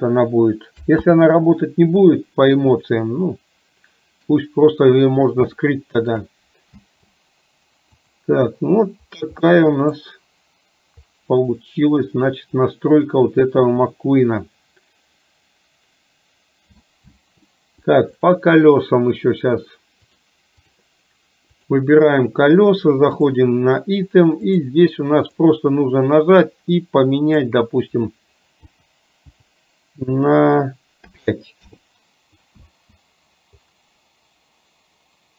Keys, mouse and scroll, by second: 2.8-4.3 middle drag, 5.7 shift+middle click, 9.5 middle click, 11.7-17.0 middle drag, 18.4 click, 20.1 click, 23.2 click, 24.6-31.7 drag.